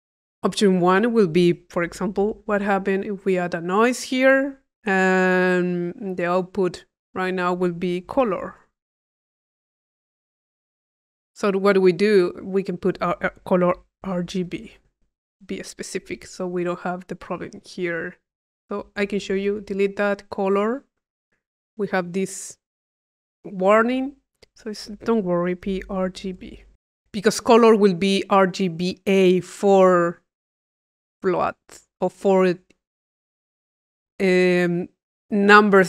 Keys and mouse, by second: 0.6-1.7 drag, 2.2 i, 2.7 click, 3.1 click, 3.7 click, 4.1 click, 5.1 click, 6.1 click, 7.2 click, 12.5 click, 15.1 click, 16.4 click, 18.6 click, 19.1 click, 24.3-26.8 drag.